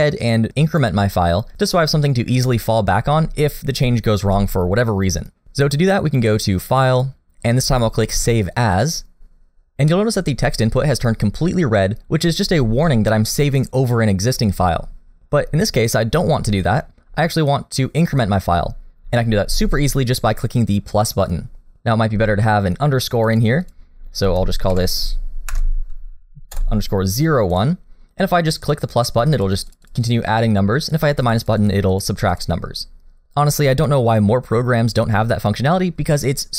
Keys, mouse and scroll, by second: 6.7 click.